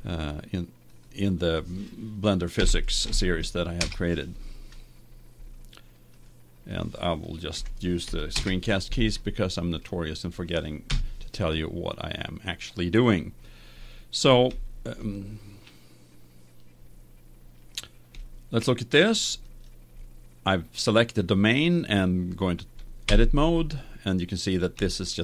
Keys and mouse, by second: 6.2-8.0 drag, 11.1 KP_1, 14.6-19.5 middle drag, 19.5 right click, 20.0 click, 20.7 right click, 23.2 Tab, 24.0-25.2 middle drag.